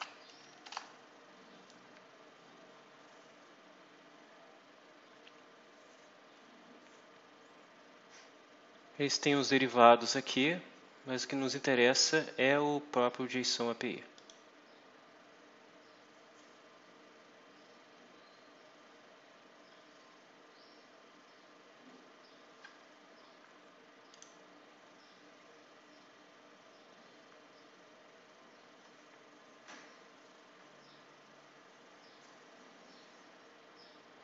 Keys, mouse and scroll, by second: 0.0-0.3 typing, 0.6 Return, 7.1 scroll down 2, 11.7 scroll down 2, 14.0 click, 20.2 scroll down 2, 21.3 scroll down 2, 21.9 scroll down 2, 22.4-22.8 scroll up 2, 24.0 click, 27.5-27.8 scroll up 2, 28.8-29.1 scroll up 2, 34.1 click.